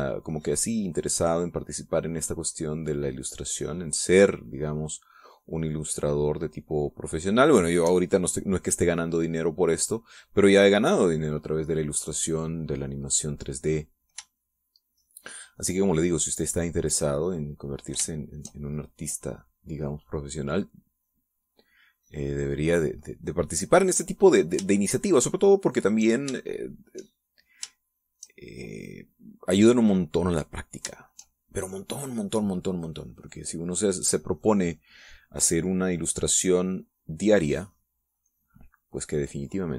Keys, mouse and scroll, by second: 0.8-8.5 drag, 9.5-11.6 drag, 15.2-16.5 shift+drag, 16.7-19.3 shift+drag, 19.4-20.7 shift+drag, 22.2 middle click, 23.7 middle click, 25.5-26.9 shift+drag, 27.1 shift+click, 28.5 shift+click, 29.4-31.6 shift+drag, 31.7 shift+click, 32.1-34.6 shift+drag, 36.8-38.3 drag.